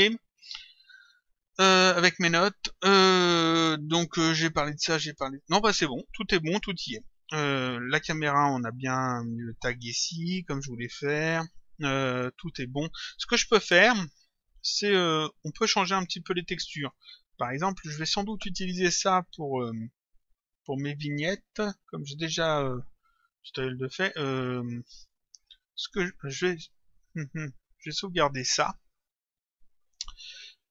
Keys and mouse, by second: 13.0 click, 16.9 click.